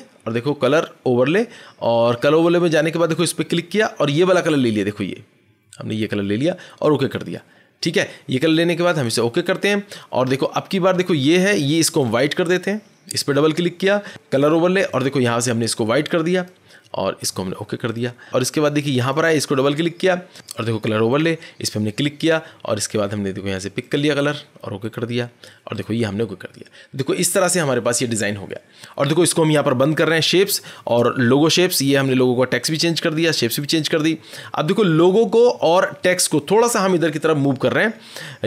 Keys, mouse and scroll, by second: 0.4 click, 1.3 click, 3.1 click, 5.9 click, 7.0 click, 8.8 click, 9.4 click, 10.5-11.0 scroll, 11.9 click, 12.1 click, 14.0 click, 14.9 click, 16.4 click, 17.2 click, 17.8 click, 18.2 scroll, 19.0 click, 19.2 click, 21.1 click, 23.8 click, 24.8 click, 25.8 click, 30.3 click, 32.6 click, 33.6 click.